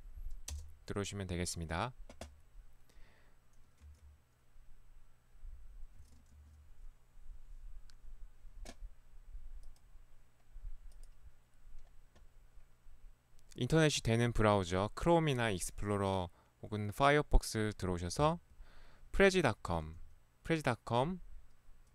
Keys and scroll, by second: 0.1-0.9 typing, 1.8 Return, 4.0 Escape, 6.5 ctrl+4.